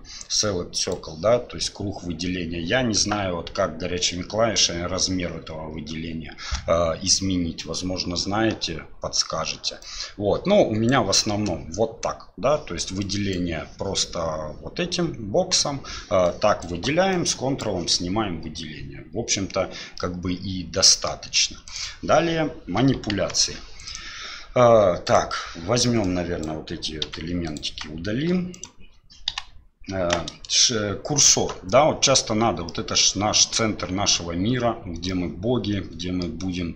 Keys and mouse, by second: 9.9-11.0 drag, 13.0 click, 16.3 drag, 17.1 ctrl+click, 19.9-21.1 middle drag, 21.6 click, 23.1 KP_1, 23.8 click, 25.0 click, 26.0-26.4 right drag, 27.0 x, 28.5 right click, 29.3 Delete, 32.6-33.0 middle drag, 35.1-36.2 middle drag.